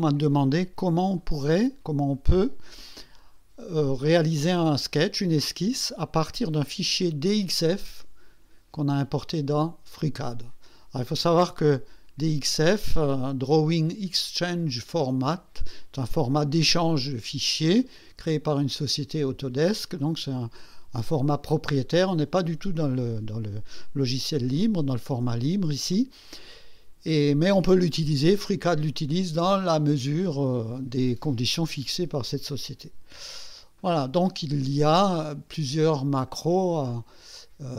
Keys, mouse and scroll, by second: 12.5 click, 28.8 click, 36.3 click.